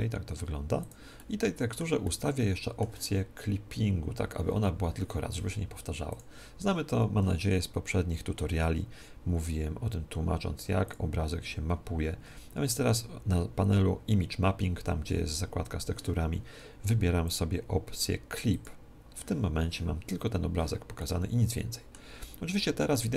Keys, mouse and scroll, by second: 0.8-2.7 drag, 1.1-4.0 middle drag, 6.1-7.9 drag, 10.8-12.7 drag, 12.5-17.1 middle drag, 17.1-19.1 drag, 20.9-23.1 middle drag.